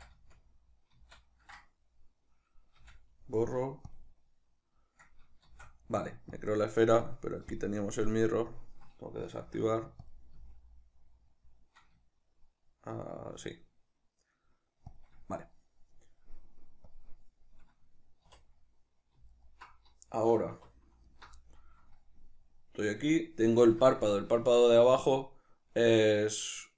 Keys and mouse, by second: 1.7-7.6 middle drag, 2.8 x, 5.5 shift+a, 7.6 click, 9.4 s, 10.2 click, 10.4 s, 15.0 shift+click, 16.9 click, 18.3 3, 19.3 alt+right click, 20.6 2, 21.1 alt+right click, 21.4-26.7 middle drag.